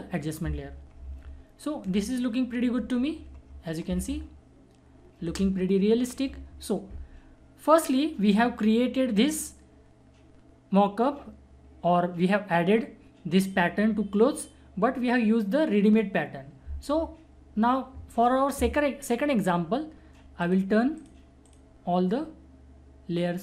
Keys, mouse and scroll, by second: 1.2 ctrl+alt+-, 3.2 ctrl+alt+=, 3.9 alt+space, 4.1 alt+click, 4.4 alt+space, 20.4 alt+click.